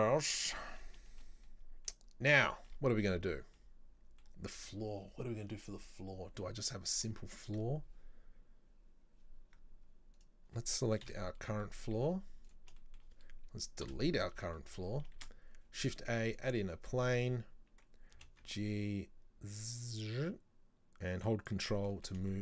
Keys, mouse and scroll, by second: 1.5 scroll up 1, 1.5-6.7 middle drag, 6.8-7.1 scroll down 2, 7.1 right click, 9.4-10.2 scroll down 3, 10.2 right click, 11.1 KP_7, 11.8 scroll up 2, 12.1 z, 12.9-13.9 shift+middle drag, 13.9 Delete, 14.6 shift+middle click, 15.3 shift+a, 16.8-18.3 scroll up 2, 18.3 g, 21.9-22.4 middle drag.